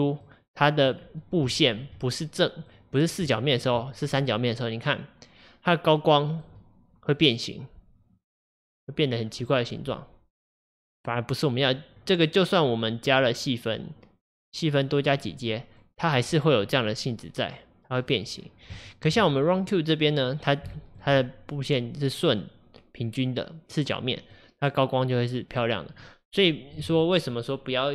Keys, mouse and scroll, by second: 0.3-1.0 middle drag, 1.0-1.6 scroll up 3, 1.6-9.2 shift+middle drag, 9.2-9.5 scroll down 2, 9.5-14.8 middle drag, 14.8-15.8 drag, 15.8 middle click, 16.3-16.8 scroll up 2, 16.8-18.4 middle drag, 18.4-18.8 scroll down 1, 18.8-20.3 shift+middle drag, 20.3-20.8 scroll up 2, 20.8-26.0 shift+middle drag, 26.0-26.5 scroll down 1, 26.5-27.9 middle drag.